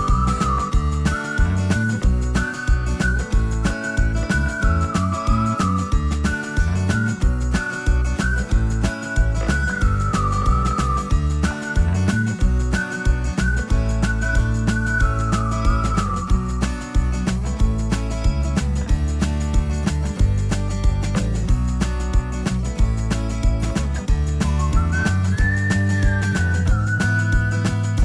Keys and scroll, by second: 11.1 m, 17.0 space.